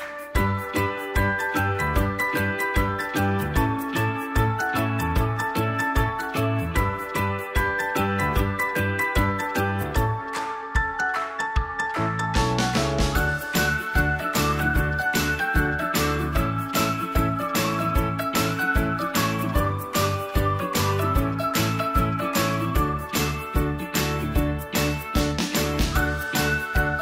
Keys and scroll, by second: 15.5 ctrl+a, 17.1 Return.